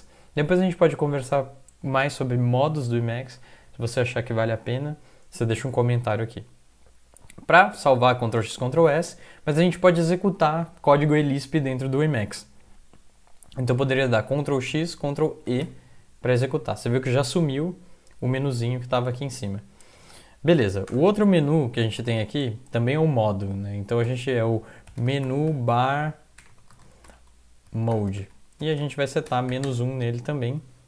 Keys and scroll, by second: 8.2 ctrl+x, 8.6 ctrl+s, 14.7 ctrl+x, 15.5 ctrl+e, 20.9 Return, 22.0 (, 22.2 ), 24.1 Left, 24.1-30.8 typing.